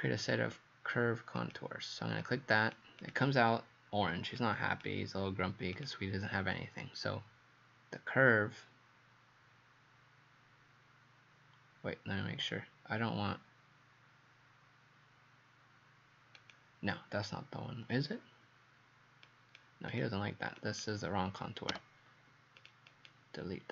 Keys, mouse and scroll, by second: 1.4 click, 19.9 click, 21.8 Delete, 22.6 click, 22.9 click.